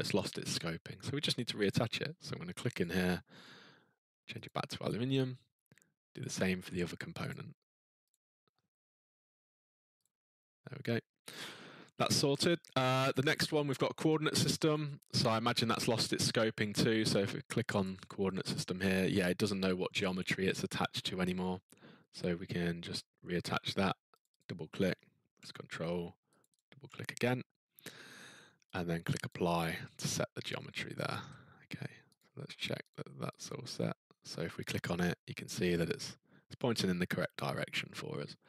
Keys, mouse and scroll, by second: 1.7 click, 2.8 click, 4.5 click, 6.2 click, 7.3 click, 8.1 click, 10.0 click, 14.7 click, 17.6 click, 17.8 click, 24.2 click, 24.4 click, 26.4 ctrl+click, 26.5 ctrl+click, 28.7 click, 29.3 click, 32.2 click, 32.9 click, 33.3 click, 36.4-37.9 scroll, 38.3 scroll.